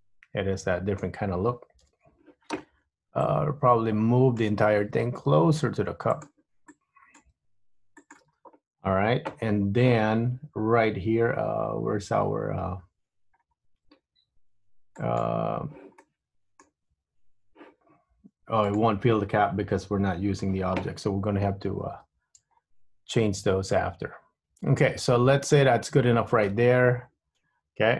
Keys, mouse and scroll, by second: 1.9 KP_3, 3.3 click, 5.0 g, 6.8 click, 7.4 g, 13.8-15.1 scroll down 3, 15.1 click, 16.2 middle click, 18.8 click, 21.9-22.6 scroll up 3, 22.6-23.3 scroll down 2, 23.3 middle click, 26.9 Tab.